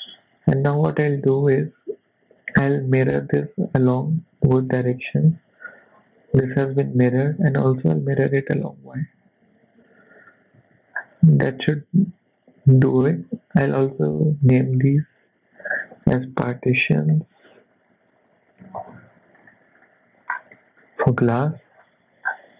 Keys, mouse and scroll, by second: 0.1 click, 0.6 shift+middle click, 2.0 click, 3.4 click, 5.7 middle click, 7.9 click, 8.4 middle click, 10.6 z, 11.0 scroll down 3, 11.3 middle click, 12.1 click, 12.5 KP_1, 14.4 click, 15.6 click, 15.7 click, 20.3 scroll up 4, 20.5 shift+middle click, 21.3 z, 21.7-22.3 scroll down 3, 22.3-22.5 scroll up 3.